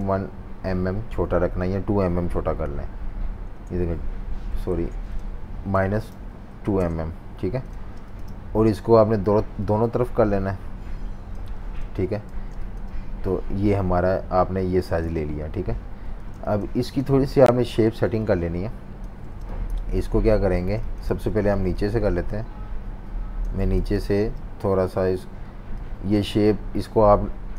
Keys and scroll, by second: 0.8 -, 2.9 typing, 3.5 Return, 4.7 super+z, 5.8-8.4 typing, 12.3 v, 12.5 space, 16.3 space, 17.9 z, 18.1 z, 19.4 space, 20.5 v, 20.7 space, 23.8 v, 23.9 space.